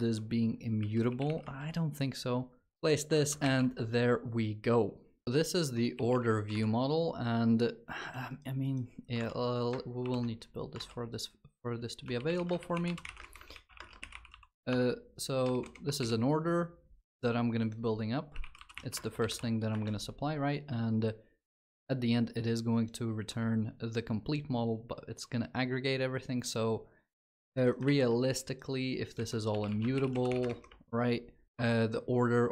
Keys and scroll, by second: 1.3 Tab, 2.6 ctrl+v, 2.9 alt+shift+f, 3.2 ctrl+s, 5.7 ctrl+s, 9.8 ctrl+shift+b.